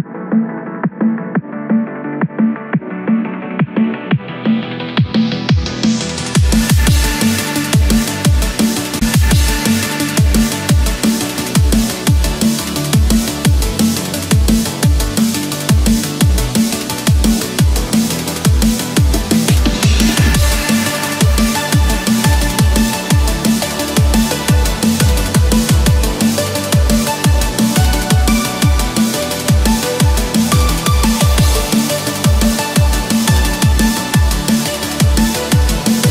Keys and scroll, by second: 1.5 ctrl+-, 3.0 ctrl+=, 25.4 ctrl+-, 26.9 ctrl+=, 27.2 ctrl+space, 35.1 ctrl+=.